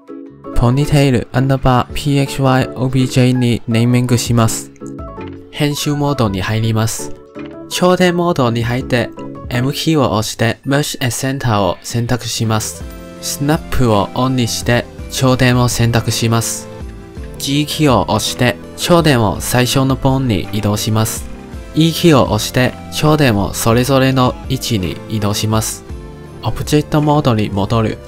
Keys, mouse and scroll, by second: 4.7-5.9 middle drag, 5.9 Tab, 8.4 click, 9.5 m, 11.5-13.7 middle drag, 13.7 click, 14.9-17.3 drag, 17.3 g, 19.7 shift+middle click, 21.6 e, 27.9 ctrl+Tab.